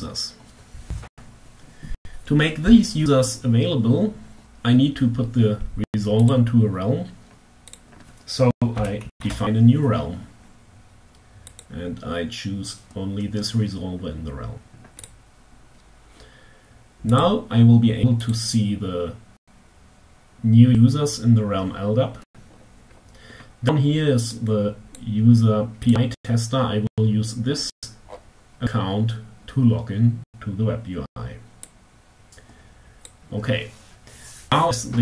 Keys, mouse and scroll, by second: 5.4 click, 7.0 click, 7.9 l, 8.2 d, 8.2 a, 8.3 p, 10.6 click, 14.5 click, 16.6 click, 17.8 click, 20.2 click, 21.5-22.6 scroll down 5, 23.9-24.8 drag, 25.4 click, 27.0-27.8 scroll up 3, 30.9 click, 32.6 click.